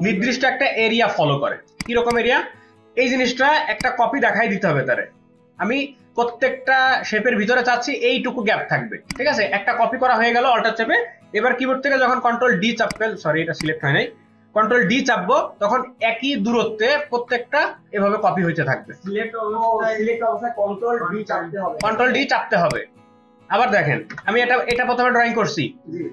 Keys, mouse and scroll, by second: 1.7 ctrl+space, 1.8 ctrl+click, 3.7 alt+click, 11.7 ctrl+d, 12.3 ctrl+d, 15.1 ctrl+d, 16.3 ctrl+d, 16.7 ctrl+d, 17.1 ctrl+d, 17.3 ctrl+d, 17.7 ctrl+d, 18.3 ctrl+d, 18.5 ctrl+d, 18.9 ctrl+d, 19.5 ctrl+d, 24.1 BackSpace.